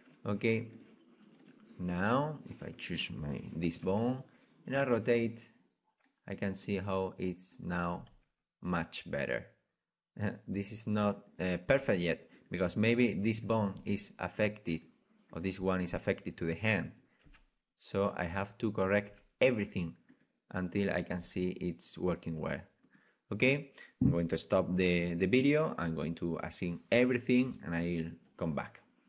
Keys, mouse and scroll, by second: 2.1-3.9 middle drag, 3.9 right click, 3.9 r, 7.5-8.4 drag, 7.5-9.1 right drag, 8.0 r, 9.4 right drag, 11.8-22.9 right drag, 11.8 r, 13.8 r, 17.2 r, 19.1 r, 21.2 r, 24.7 right click.